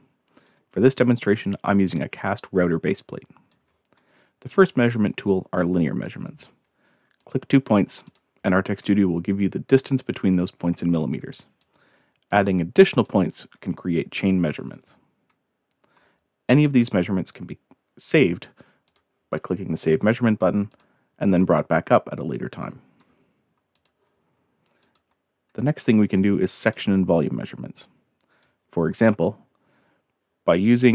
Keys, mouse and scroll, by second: 0.4-3.5 drag, 4.5 click, 5.6-6.0 drag, 7.2 click, 8.1 click, 11.6-12.3 drag, 13.0 click, 18.9 click, 20.7 click, 23.7 click, 24.8 click, 26.7-28.4 drag.